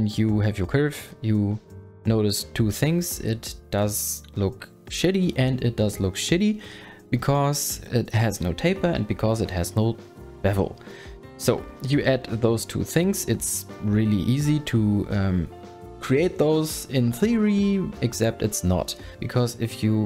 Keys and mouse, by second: 14.7 shift+middle click, 16.9 click, 17.1 click.